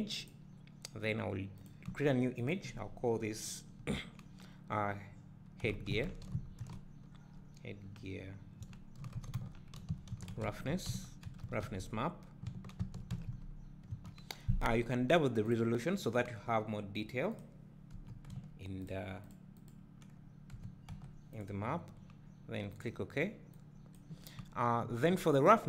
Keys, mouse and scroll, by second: 1.6 click, 15.5-24.1 drag, 15.5 s.